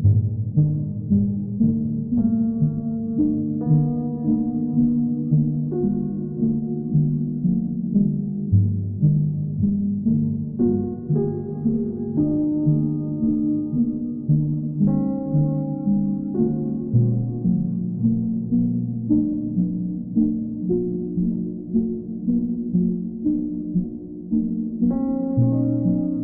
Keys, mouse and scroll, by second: 2.2-3.3 drag, 4.4-5.5 right drag, 6.5-7.6 right drag, 8.5 click, 17.3 click, 22.8 click, 24.4 ctrl+click, 24.9 click, 25.5 w.